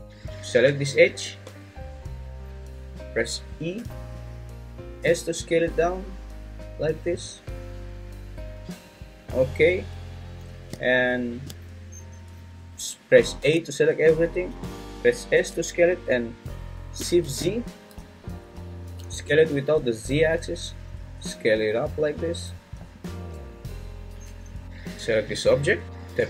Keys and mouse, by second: 1.0 `, 3.7 e, 5.0 s, 13.4 a, 15.3 s, 17.3 shift+z, 23.0-24.1 drag, 24.1 Tab, 25.8 Tab.